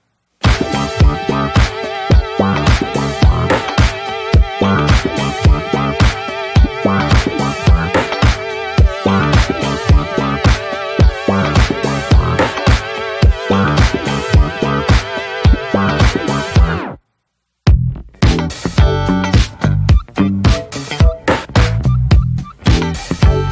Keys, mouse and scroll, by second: 5.6-6.1 scroll down 1, 6.1 middle click, 6.2-7.1 scroll up 1, 7.1 scroll down 1, 7.3 middle click, 7.3-8.0 scroll up 2, 7.5 shift+middle click, 8.0-9.2 shift+drag, 9.2 scroll down 1, 9.3 middle click, 10.1 alt+middle click, 10.4-11.7 scroll up 4, 10.5 shift+middle click, 10.9 shift+middle click, 11.7 click, 12.5 f, 14.3 click, 14.6-16.2 shift+middle drag, 16.2 click, 16.3 scroll down 2, 16.5 shift+middle click, 16.7-18.7 scroll up 2, 17.0 shift+middle click, 18.7-21.0 drag, 21.0-23.1 shift+middle drag, 23.1-23.5 drag.